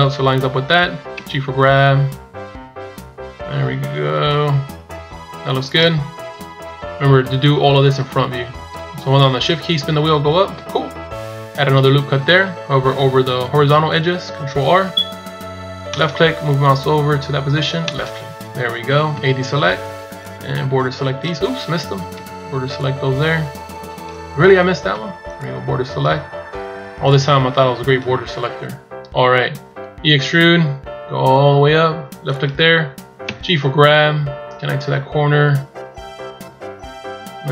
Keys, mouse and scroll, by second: 1.0 g, 7.5-8.0 shift+scroll up 5, 9.4 shift+scroll up 3, 10.1-10.7 shift+scroll up 2, 19.5 b, 29.5 e.